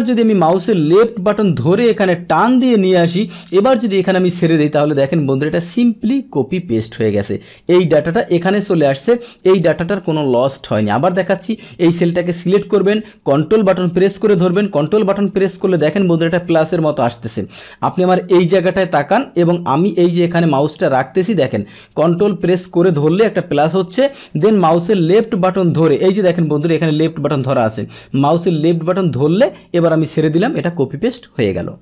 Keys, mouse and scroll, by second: 0.9-3.6 ctrl+drag, 5.6 click, 7.5 click, 8.2 click, 9.3 click, 11.0 click, 24.6-29.9 ctrl+drag.